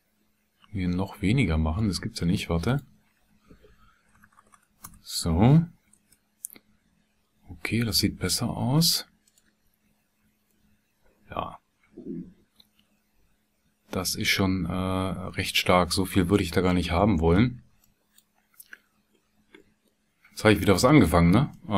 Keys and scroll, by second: 4.0 BackSpace, 5.7 KP_1, 6.0 KP_Enter.